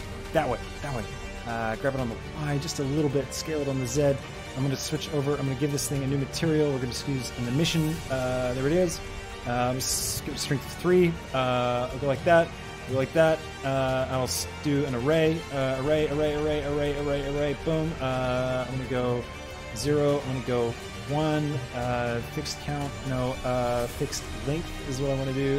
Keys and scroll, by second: 2.4 y, 3.1 s, 3.5 z, 10.1 Return, 12.7 z, 19.3 KP_0, 20.0 Tab, 20.8 Return.